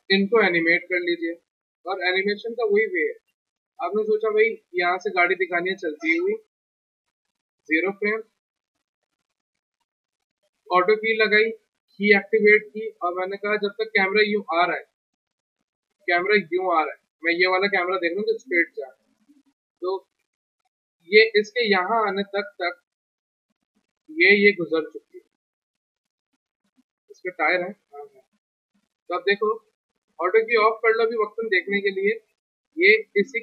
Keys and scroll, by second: 0.1 p.